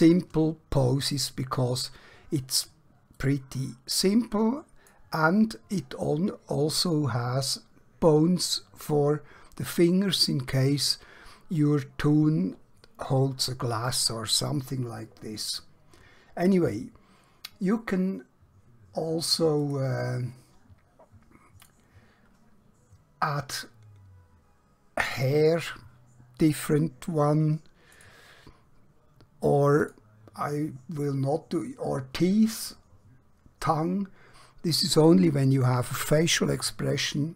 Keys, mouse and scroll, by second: 0.7 scroll down 1, 1.7 scroll up 1, 3.2-5.0 middle click, 19.5 click.